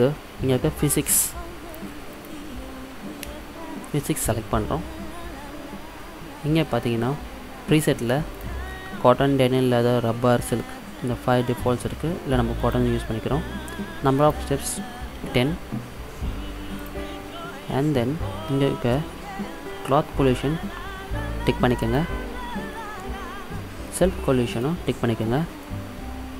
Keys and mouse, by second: 2.2 click, 8.4-10.4 drag, 14.2-16.1 drag, 17.8-21.9 middle drag, 21.9-23.9 drag, 23.7 middle click, 24.8-26.0 drag, 26.0-26.3 middle drag, 26.3 click.